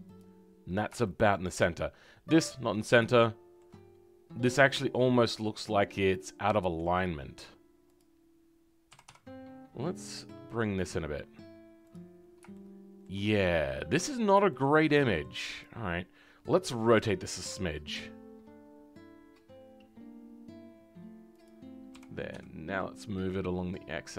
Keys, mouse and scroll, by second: 1.0-7.9 shift+middle drag, 7.9 click, 12.5 shift+middle click, 13.2 scroll up 1, 14.4-15.6 shift+middle drag, 15.6 click.